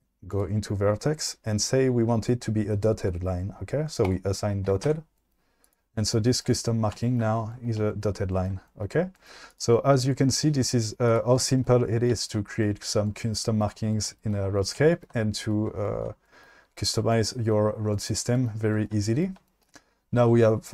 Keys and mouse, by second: 0.4 click, 4.0 click, 4.9 Tab, 5.6 click, 9.6 click, 11.1 click, 15.7-16.0 shift+middle drag, 18.6 shift+middle drag, 19.4 shift+middle click.